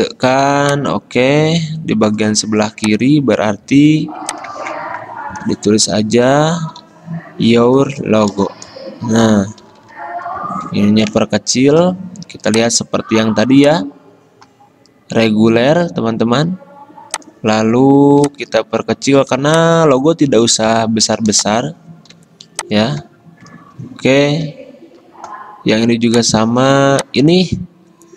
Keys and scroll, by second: 0.0 ctrl+f, 4.1 typing, 4.8 ctrl+a, 5.8-10.5 typing, 10.9 ctrl+shift+Left, 22.3 i, 24.8 x.